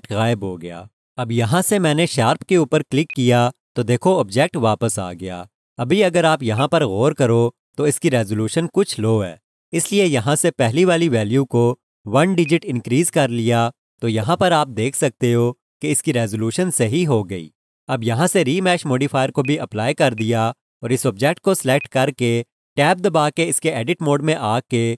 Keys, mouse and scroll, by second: 3.1 click, 5.9 scroll up 1, 6.5 alt+shift+click, 12.4 click, 14.0-15.5 scroll down 1, 19.4 click.